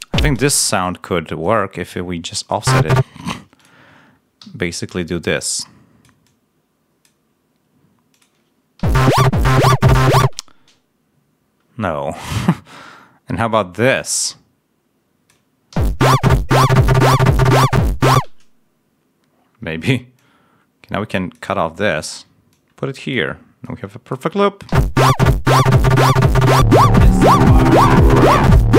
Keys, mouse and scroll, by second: 0.2 ctrl+space, 2.5 space, 3.5 click, 4.3 g, 5.0-6.1 drag, 7.0 click, 8.0 click, 8.7 l, 10.1 space, 12.2-13.6 drag, 13.7-15.4 drag, 15.6 l, 18.0 space, 20.1-21.4 drag, 22.0 s, 22.4 click, 24.6 l.